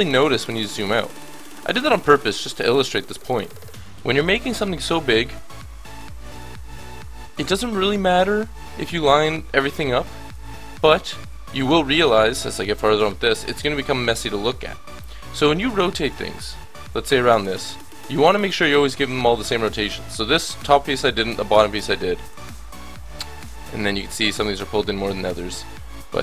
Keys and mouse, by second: 0.7 middle click, 1.7-3.3 middle drag, 3.4-6.5 drag, 6.5-9.8 drag, 10.2 click.